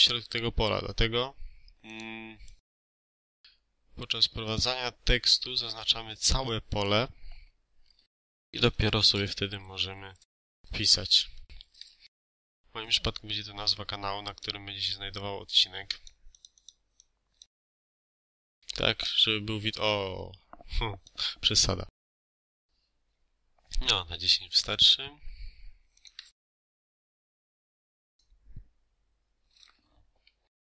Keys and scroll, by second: 8.4-11.2 typing, 12.1 ctrl+a, 18.1 2, 18.2 0, 18.8 Return, 22.0 1, 22.1 0, 26.4 Escape.